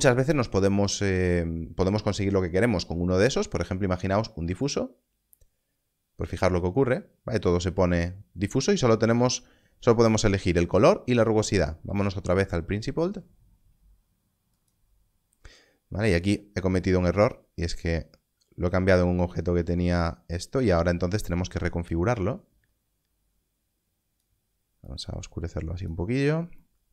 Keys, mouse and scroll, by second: 4.6 click, 11.5 click, 14.5 click.